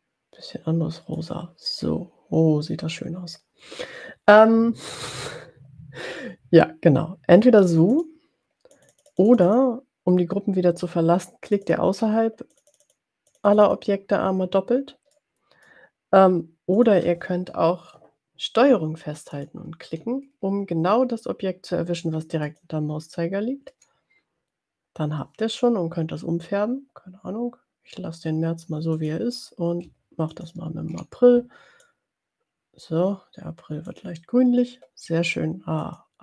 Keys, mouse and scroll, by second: 7.9 click, 8.7 click, 11.7 click, 12.7 click, 13.5 click, 15.2 middle click, 16.8 click, 19.3 click, 22.8 ctrl+click, 29.1 click, 30.3 ctrl+click, 32.1-34.3 drag, 35.8 click.